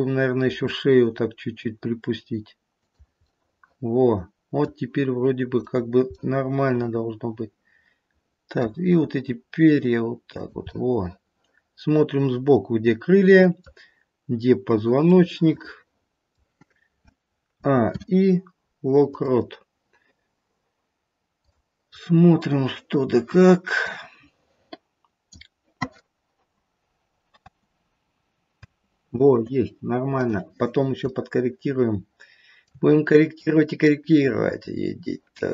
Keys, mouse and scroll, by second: 0.5 r, 3.2 middle click, 4.5 middle click, 5.6 click, 6.2 middle click, 6.8 middle click, 7.8 middle click, 8.9 r, 10.6 middle click, 12.8 middle click, 15.2 middle click, 17.6 a, 17.9 i, 21.5 click, 21.9-23.9 scroll down 4, 23.9 click, 27.3 space, 28.6 space, 30.1 click, 31.2 shift+middle click, 32.8-33.8 scroll up 3, 33.8-34.3 scroll down 1.